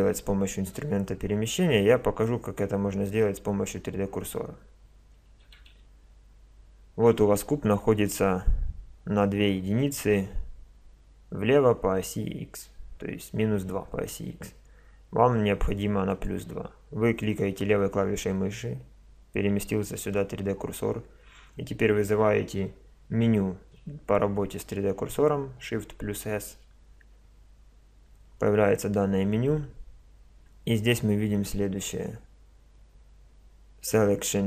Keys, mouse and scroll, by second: 5.4 KP_1, 6.1 KP_5, 16.1-19.2 drag, 26.3 shift+s.